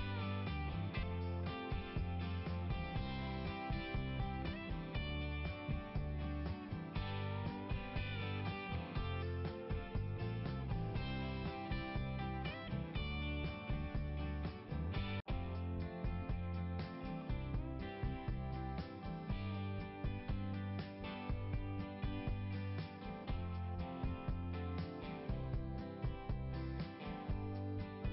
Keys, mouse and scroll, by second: 2.8 click, 7.2 click, 11.2 click, 12.3 click, 12.5 click, 15.5 click, 19.7 right click, 19.9 right click, 21.2 click, 23.2 click, 24.8-27.3 typing.